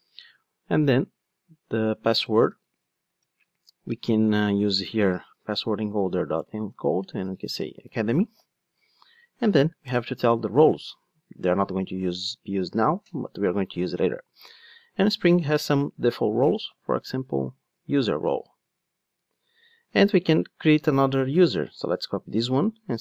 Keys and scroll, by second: 2.9 Return, 12.9 Return, 22.1 super+c.